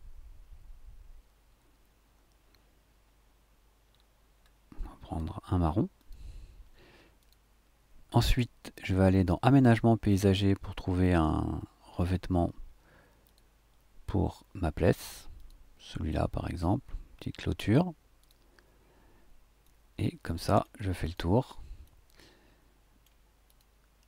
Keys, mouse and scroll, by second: 3.8-4.4 scroll down 1, 4.4 scroll up 1, 4.6-5.9 scroll down 1, 5.9 click, 5.9-7.2 scroll down 1, 7.2 click, 7.2 scroll down 1, 8.8 click, 12.3-12.7 scroll up 2, 13.2 click, 15.3 click, 18.2 click, 19.6-20.8 middle drag, 21.0 click, 21.8-23.2 middle drag, 23.4 click.